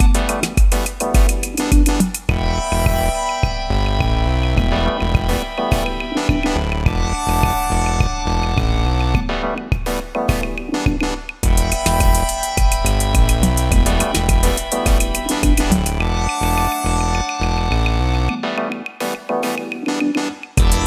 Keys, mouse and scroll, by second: 0.0 ctrl+z, 6.7 typing, 7.2 Return, 15.6 alt+BackSpace, 18.3 ctrl+d.